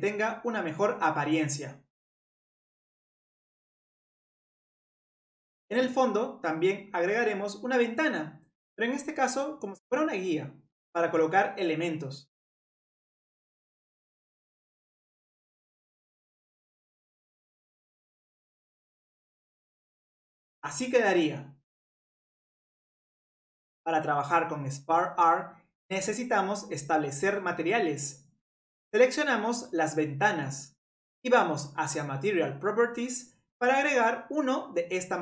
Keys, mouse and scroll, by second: 2.0-5.1 middle drag, 6.9 click, 9.0 click, 9.6-11.1 middle drag, 11.1-14.5 drag, 14.5 middle click, 15.1 scroll down 1, 15.1 middle click, 15.6 middle click, 15.7 scroll up 1, 15.8 middle click, 16.2-16.5 scroll down 2, 17.2 scroll up 1, 17.3 middle click, 18.0 click, 18.2 click, 18.2 scroll down 1, 18.3 middle click, 18.8 middle click, 19.4 click, 19.5-19.8 middle drag, 21.3-21.6 middle drag, 21.6 click, 22.3-23.3 middle drag, 24.5-26.9 middle drag, 26.9 click, 28.2 ctrl+click, 29.4 click, 30.4 shift+click, 31.2 shift+click, 32.7 click, 35.0-35.2 drag.